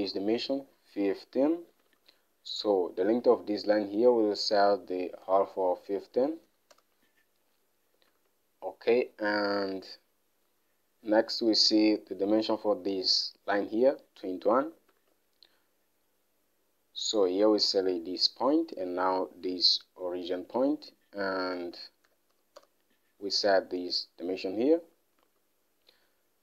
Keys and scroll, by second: 2.4 alt+Tab, 5.2-6.9 typing, 7.1 Return, 8.5 alt+Tab, 15.5 alt+Tab, 21.7-23.2 typing, 25.6 alt+Tab, 25.8 alt+Tab.